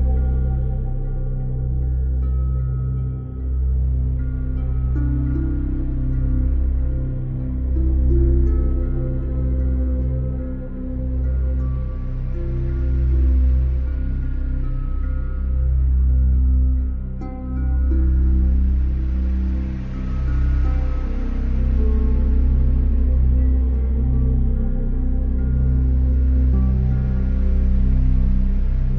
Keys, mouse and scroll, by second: 0.0 alt+click, 0.5 alt+click, 1.2 shift+click, 1.7 shift+click, 2.7 click, 3.0 shift+click, 3.9 shift+click, 4.9 shift+click, 5.2 shift+click, 6.0 shift+click, 6.7 shift+click, 9.7 click, 12.8 alt+click, 14.8 alt+click, 16.9 click, 18.5 alt+right click, 19.2 alt+click, 20.5 click, 20.8 Delete, 21.5 click, 23.5 click, 24.8 click, 25.7 click, 26.2 click, 27.3 click, 28.6 click.